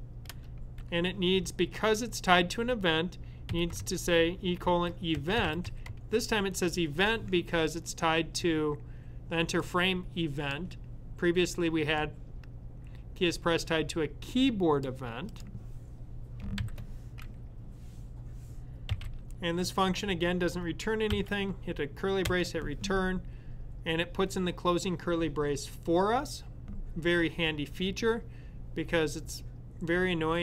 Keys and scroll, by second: 0.0-0.2 typing, 3.0-6.4 typing, 18.7-19.5 typing, 20.9 shift+[.